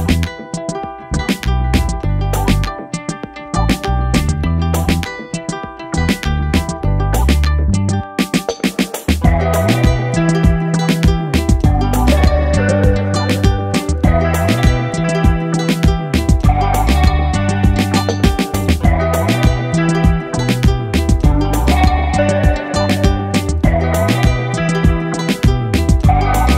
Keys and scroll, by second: 3.2 ctrl+-, 3.5 ctrl+0, 4.2 space, 6.4 ctrl+0, 6.8 ctrl+l, 10.0 ctrl+0, 12.3 ctrl+t, 13.2 Return, 13.7 ctrl++, 13.9 space, 15.1 b, 15.4 ctrl+z, 15.5 [, 16.0 space, 17.8 x, 18.2 ctrl+z, 18.5 space, 19.0 ctrl+0, 24.3-25.3 typing.